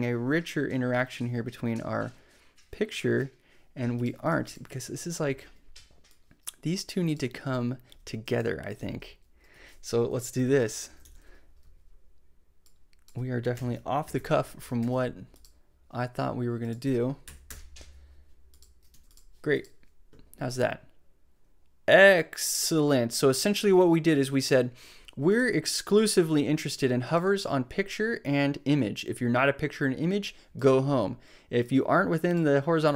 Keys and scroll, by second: 7.8 super+x, 8.7 super+v, 9.5 super+z, 10.2 shift+super+z, 10.3 shift+super+9, 10.4 shift+0, 10.8 shift+Left, 11.0 super+v, 12.1 super+/, 13.5 BackSpace, 14.6 shift+super+7, 14.7 shift+super+s, 17.2 super+BackSpace, 18.4 BackSpace, 18.9 super+s.